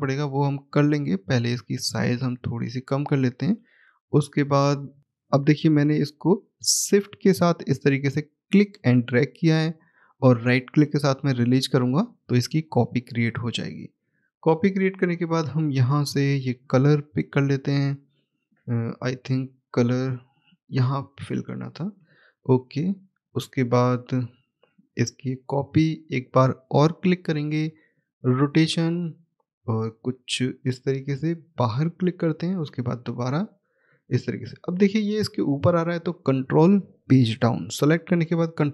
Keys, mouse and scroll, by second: 1.4 click, 2.3-3.0 scroll down 1, 3.0 middle click, 4.2 click, 10.7 shift+right click, 15.0 click, 17.4 double click, 20.2 click, 24.7 right click, 26.7 click.